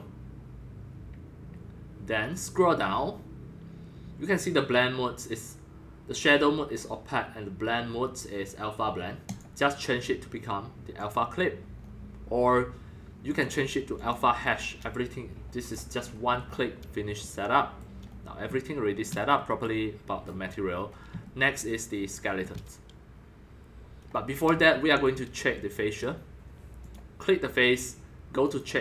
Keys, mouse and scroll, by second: 2.2-4.0 scroll down 9, 4.0-7.9 middle drag, 7.9 scroll, 9.3-11.8 drag, 11.8-13.4 middle drag, 13.4-15.0 drag, 15.0-15.7 middle drag, 15.7 click, 15.9-20.2 middle drag, 20.2-20.8 scroll down 7, 20.7 middle click, 20.8-26.5 shift+middle drag, 26.9-27.4 drag, 27.7-28.8 drag.